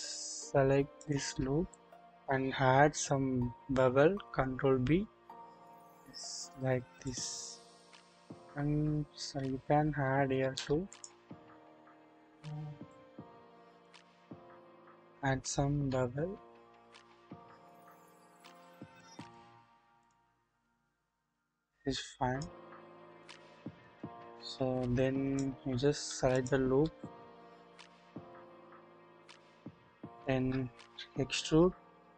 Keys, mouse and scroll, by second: 0.3 typing, 0.9 alt+click, 2.7 ctrl+b, 4.5 scroll up 1, 7.8-8.9 scroll up 1, 9.2 ctrl+z, 9.2 ctrl+z, 10.9 alt+shift+click, 11.9 alt+shift+click, 12.9-13.9 drag, 15.7 ctrl+b, 19.6-20.2 scroll down 1, 20.4 scroll up 1, 21.0-21.5 scroll down 1, 22.0 click, 23.2-23.9 shift+middle drag, 24.5 click, 25.6-26.2 scroll up 1, 26.3 alt+click, 27.7-30.3 shift+middle drag, 31.2 typing.